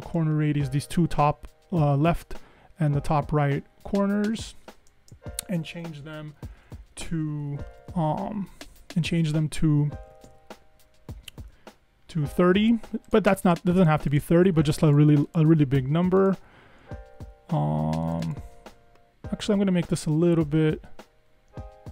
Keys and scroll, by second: 5.8 Up, 5.9 Up, 6.1 Up, 6.2 Up, 6.4 Up, 6.6 Up, 6.8 Up, 6.9 Up, 7.2 Up, 7.4 Up, 7.5 Up, 7.7 Up, 7.9 Up, 8.0 Up, 8.1 Up, 8.3 Up, 8.7 Up, 8.9 Up, 9.1 Up, 9.3 Up, 9.4 Up, 9.7 Up, 9.9 Up, 10.0 Up, 10.3 Up, 10.3 Up, 11.2 Up, 11.3 Up, 11.4 Up, 20.6 Escape, 20.9 Escape.